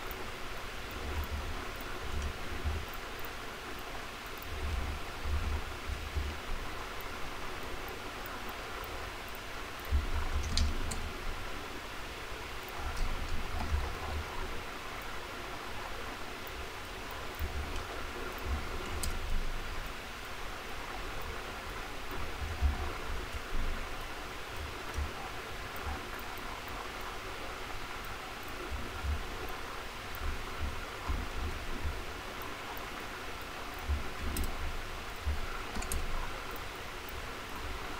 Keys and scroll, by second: 0.8 ctrl+c, 1.2 ctrl+a, 2.4 ctrl+v, 4.3 ctrl+a, 5.0 ctrl+shift+., 5.9 ctrl+b, 17.4 ctrl+a, 22.2 ctrl+b, 22.9 ctrl+shift+., 30.9 ctrl+shift+., 31.7 ctrl+b.